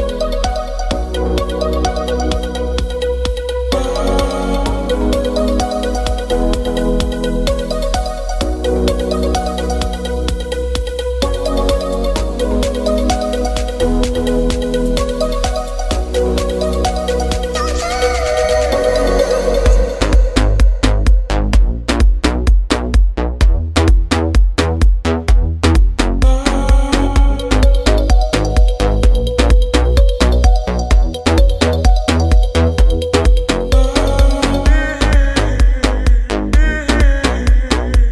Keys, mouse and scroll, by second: 1.5 click, 4.9 click, 6.3-7.6 middle drag, 7.6 scroll up 1, 11.3 click, 14.8-18.7 middle drag, 27.4-38.1 drag.